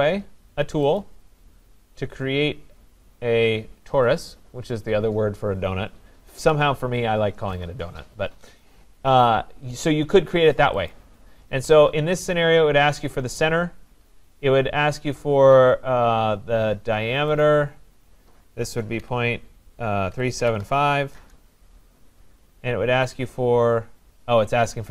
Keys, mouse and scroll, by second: 1.0 click, 10.9 click, 13.3 click, 17.4 click, 19.0-21.2 typing.